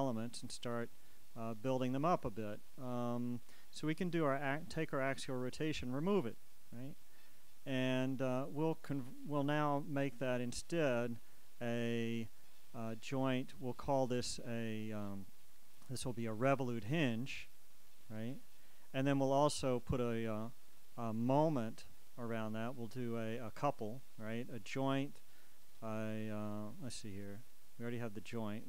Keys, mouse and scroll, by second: 0.8-3.0 drag, 3.0-3.4 scroll up 1, 4.4 click, 7.8 click, 10.3 shift+right click, 11.9 click, 16.7 click, 18.1 click, 19.7 right click, 21.5 shift+right click, 23.8-25.5 shift+drag.